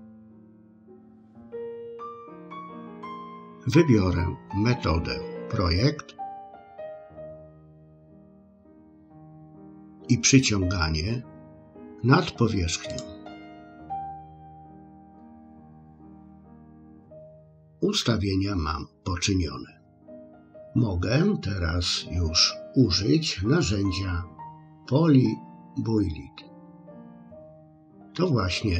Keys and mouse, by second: 6.7-7.7 drag, 13.0-15.7 drag, 26.8 click.